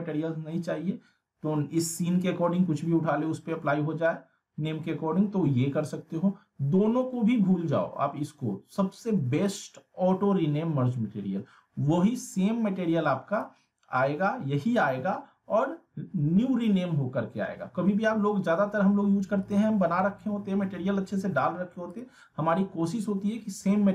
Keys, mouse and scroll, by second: 13.5 click, 19.7 click, 21.9 click.